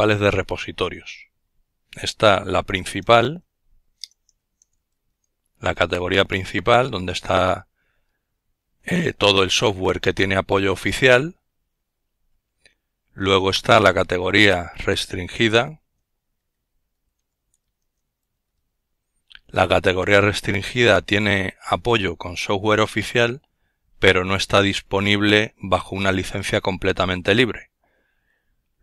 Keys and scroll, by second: 0.0-2.2 typing, 4.2-4.9 typing, 11.4-15.8 typing.